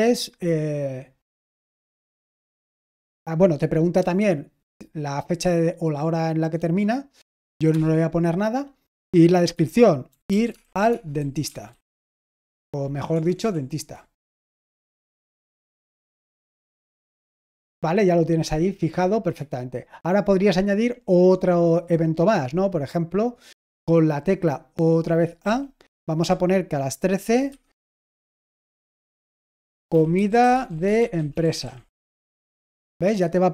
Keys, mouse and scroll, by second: 10.1-13.5 typing, 14.4 ctrl+w, 14.9-16.4 typing, 25.3 typing, 27.2-32.1 typing.